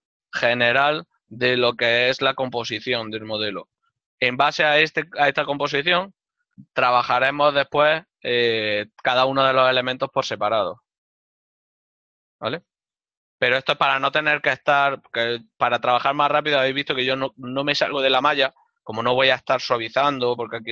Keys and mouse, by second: 13.3 alt+right click.